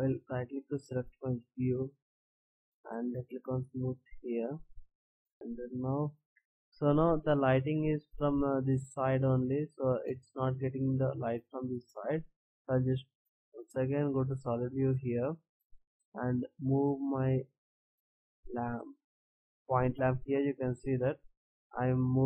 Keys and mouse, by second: 2.4 t, 3.4 click, 5.2 t, 6.4 shift+z, 13.8 shift+z, 15.7 right click, 16.5 click, 16.5 middle drag, 16.7 click, 17.0-18.3 drag, 21.5 KP_0.